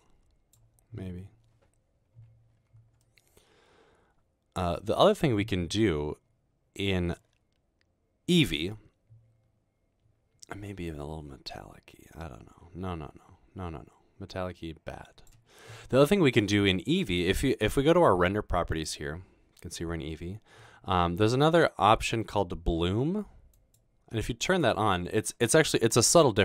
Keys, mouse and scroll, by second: 6.9 middle click, 11.0 click, 12.2-15.3 drag, 18.7 click, 23.6 click, 24.5 click.